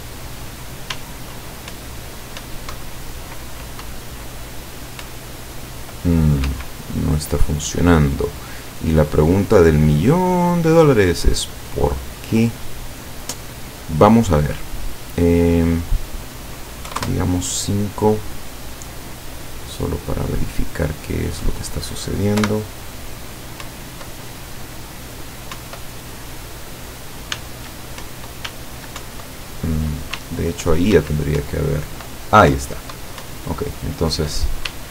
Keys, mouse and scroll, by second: 1.0 s, 1.7 Up, 3.9 w, 5.1 Up, 6.5 Escape, 10.5-12.8 drag, 15.6 click, 16.9 KP_5, 17.0 KP_Enter, 20.1-21.7 drag, 22.5 p, 23.7 Up, 25.6 Up, 27.4 s, 28.1 Up, 28.5 s, 29.1 Up, 30.2 w, 31.5 Up, 34.8 w.